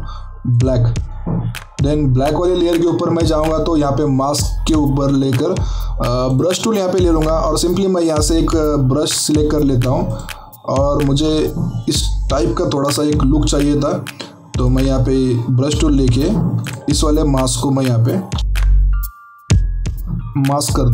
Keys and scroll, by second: 18.4 ], 18.9 ].